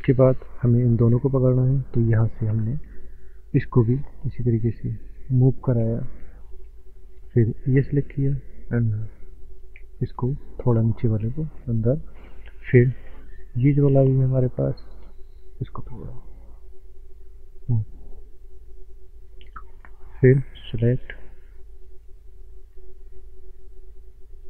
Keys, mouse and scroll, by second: 0.5 click, 2.0-2.6 scroll up 3, 2.8 shift+middle click, 3.9 click, 4.0 click, 7.4 click, 17.8 click, 20.2 click, 21.6 click.